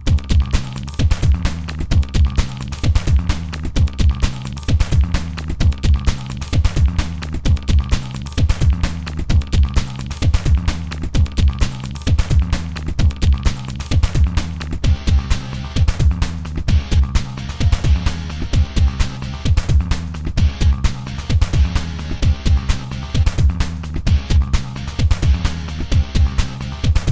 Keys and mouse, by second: 0.0 g, 4.6-5.4 middle drag, 5.5 a, 8.9-11.1 typing, 12.9-23.8 typing, 14.1 click, 16.8 drag, 21.6 ctrl+z, 25.3 middle click, 25.4-27.1 typing.